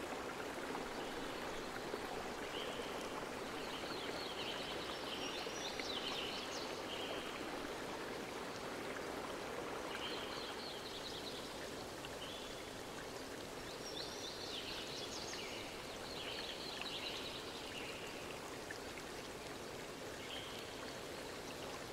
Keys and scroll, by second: 1.0 z.